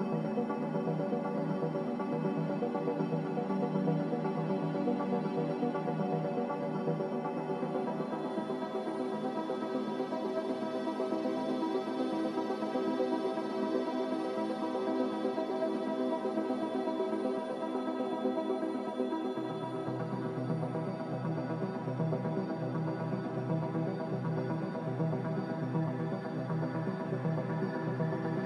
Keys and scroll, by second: 0.3 a, 4.5-5.1 typing, 17.3 0.